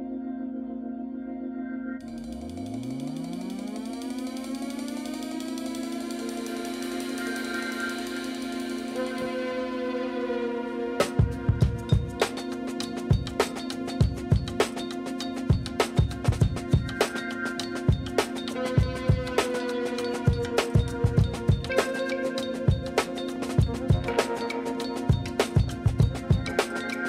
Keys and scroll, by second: 2.9 Tab, 9.0 Tab, 12.3 Tab, 16.4 Tab, 18.3 i, 22.9 q, 24.8 ctrl+b, 26.8 Tab.